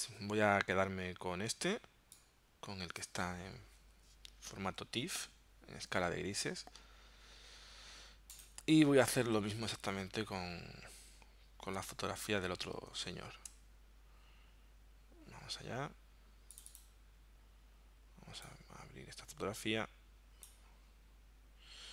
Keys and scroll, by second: 0.1 BackSpace, 9.3 super+Tab, 13.0 super+Tab.